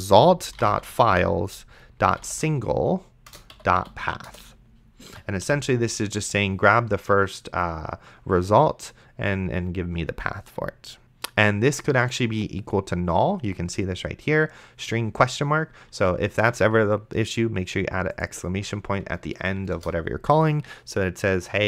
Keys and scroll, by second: 0.0-3.8 typing, 3.3 Return, 4.3 Return, 5.1 End, 5.4 ;, 16.7 shift+1, 19.7 Return.